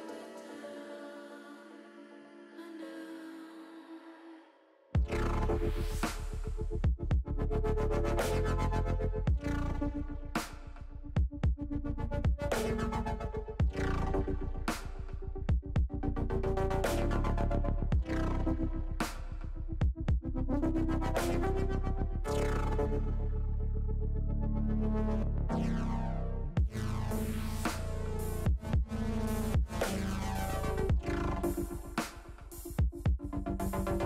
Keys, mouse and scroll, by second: 0.4 ctrl+shift+z, 1.8 shift+a, 8.0-9.3 drag, 10.4 s, 12.5 click, 13.6 KP_0, 15.5 click, 16.4-17.8 drag, 19.0-20.7 drag, 22.4 click, 24.3 click, 25.8-27.3 drag, 28.4 click, 30.0 click, 31.5 click.